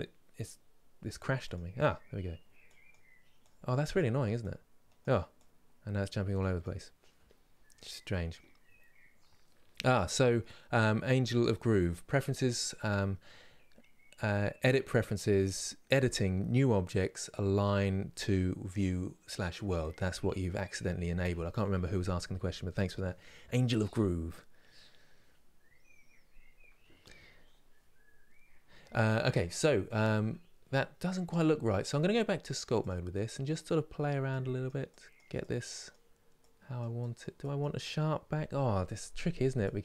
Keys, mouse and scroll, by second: 2.6 click, 33.2-39.8 drag.